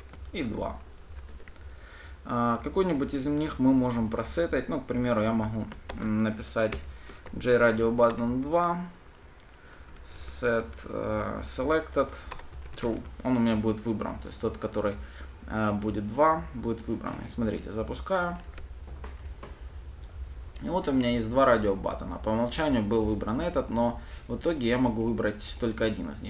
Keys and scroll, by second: 6.2 shift+Return, 8.5 Return, 12.6 Return, 18.7 ctrl+shift+F10, 19.8 ctrl+shift+F10.